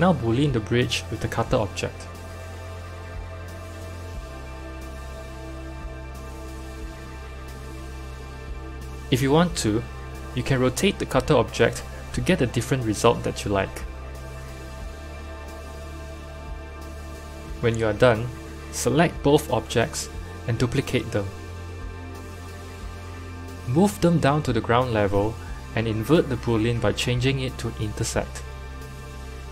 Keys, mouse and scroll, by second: 4.7 click, 6.1 KP_3, 6.8-7.3 scroll up 5, 7.3-8.9 shift+middle drag, 8.9 click, 10.9 r, 12.1-14.1 drag, 14.1 r, 17.5 click, 20.1 shift+click, 21.5 shift+d, 23.4 g, 26.1 click, 27.8-29.5 drag.